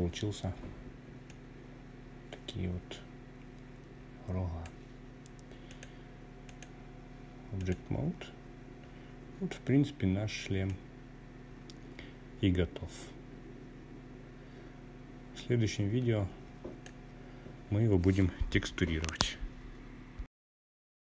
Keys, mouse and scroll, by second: 5.5 click, 6.8-8.5 scroll up 2, 8.6-14.9 drag.